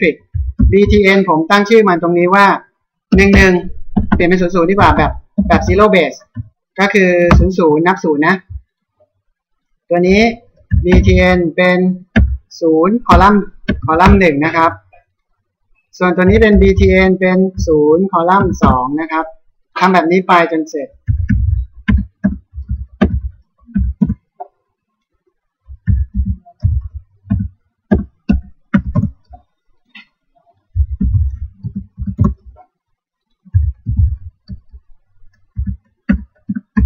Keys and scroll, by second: 3.6 BackSpace, 7.3 Return, 10.7 b, 13.7 BackSpace, 14.0 Return, 16.2 b, 18.6 Return, 21.1 b, 22.2 BackSpace, 24.0 Return, 25.9 b, 27.9 BackSpace, 29.0 Return, 30.8 b, 32.2 Return, 33.6 b, 36.5 BackSpace.